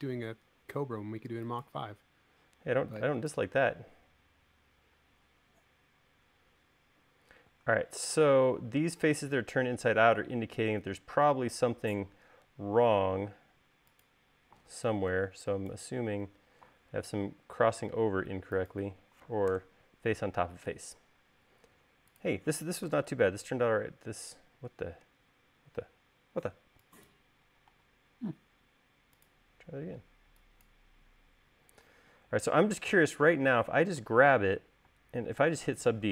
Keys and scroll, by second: 15.7 super+z, 16.9 super+z, 20.2 BackSpace, 23.6 BackSpace, 27.1 e, 28.4 l, 32.2 e, 35.6 space.